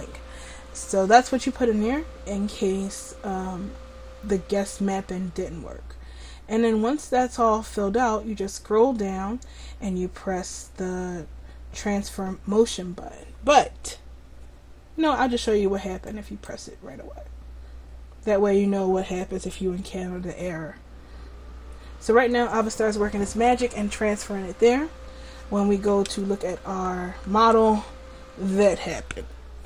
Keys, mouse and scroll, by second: 3.9-5.1 scroll up 1, 5.1-5.8 scroll down 1, 16.1-23.6 drag, 26.2-29.0 drag, 27.8-29.0 middle drag.